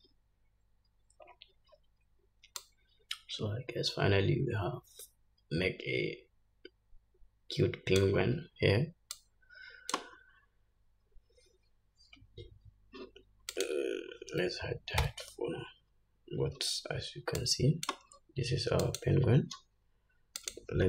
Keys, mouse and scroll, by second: 1.8 click, 5.2-16.3 drag, 12.9-13.6 scroll down 2, 17.6 h, 18.6-18.9 scroll up 2, 19.9-20.8 drag.